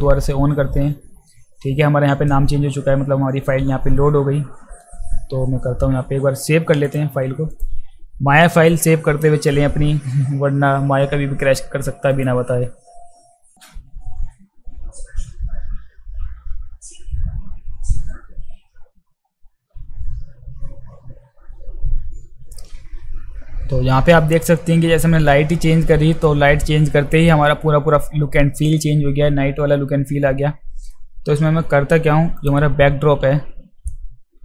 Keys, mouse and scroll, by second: 6.8 click, 7.5 click, 12.1 click.